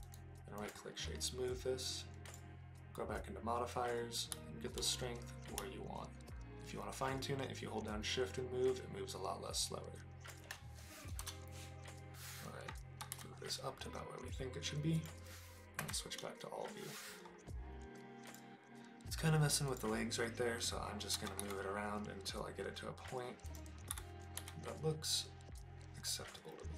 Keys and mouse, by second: 0.1 right click, 2.3 click, 3.8-10.3 drag, 11.2 KP_0, 13.0 g, 13.1 z, 14.9 click, 15.8 KP_Divide, 18.2 click, 19.6 click, 21.1 g, 21.4 y, 23.5 click, 23.9 r, 24.4 z.